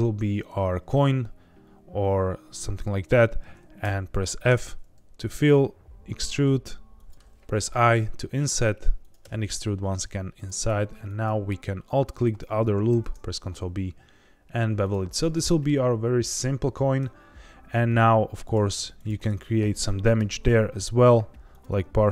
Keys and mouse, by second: 2.9 click, 3.8 f, 4.4 e, 6.9 click, 7.4 i, 9.0 click, 9.2 e, 10.3 click, 10.6 2, 12.8 ctrl+b, 14.8 click, 15.5 middle click, 18.9 ctrl+click, 19.3 middle click, 20.2 ctrl+b, 21.4 click, 21.6 1.